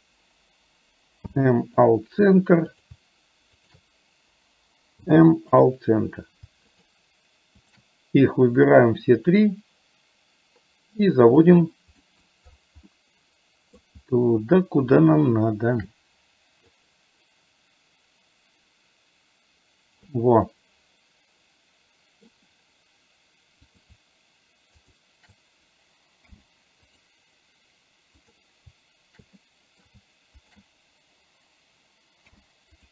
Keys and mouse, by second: 1.3 m, 5.0 m, 6.8 shift+click, 7.7 shift+click, 8.8-11.5 drag, 12.1 middle click, 13.0 middle click, 15.1 shift+middle click, 16.8-20.2 drag, 20.6-22.3 middle drag, 23.7 click, 26.3 m, 28.3 click, 29.6 middle click, 30.5 shift+click, 32.3 m.